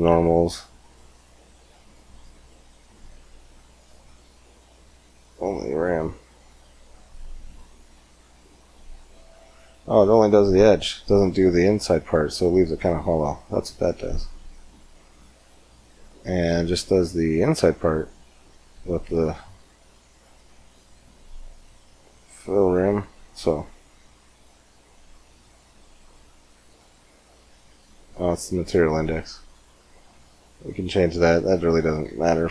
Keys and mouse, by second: 4.4-6.0 middle drag, 8.3 middle click, 11.1-12.6 middle drag, 13.6-15.4 drag, 15.4-19.3 middle drag, 19.3-26.2 drag, 26.8-28.8 middle drag, 28.8-31.0 drag, 31.0-32.5 middle drag.